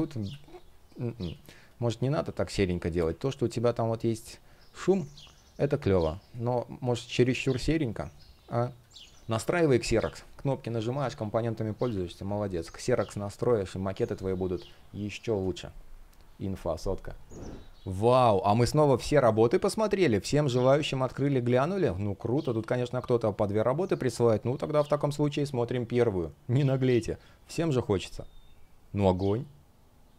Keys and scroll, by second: 4.5 space, 12.0 space.